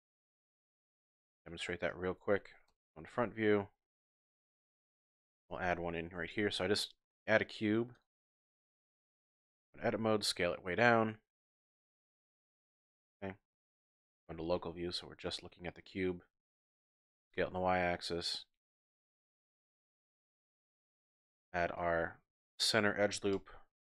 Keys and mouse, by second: 0.6 Tab, 1.3-1.7 shift+middle drag, 2.7 KP_1, 4.1-4.4 shift+drag, 5.1 shift+click, 6.2 shift+a, 8.8 Tab, 9.5 s, 11.8 click, 12.7 KP_Decimal, 14.0 KP_Divide, 15.0 click, 16.9 s, 17.1 y, 19.6 click, 20.2 ctrl+r, 20.6 click, 21.3 z, 21.8 click, 23.3 c.